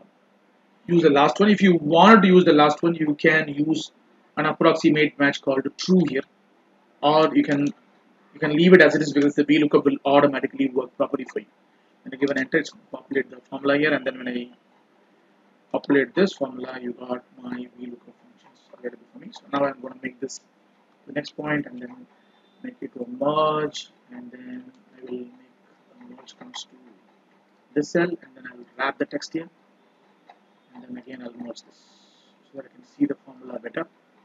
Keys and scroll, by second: 12.1 ctrl+Return, 16.0 ctrl+d, 19.6 ctrl+x.